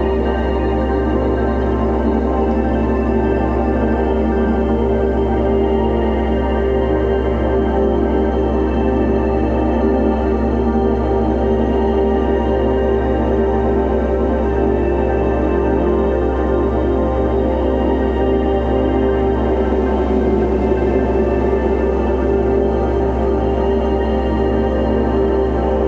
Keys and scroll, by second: 0.6 ctrl+t, 22.2 Caps_Lock.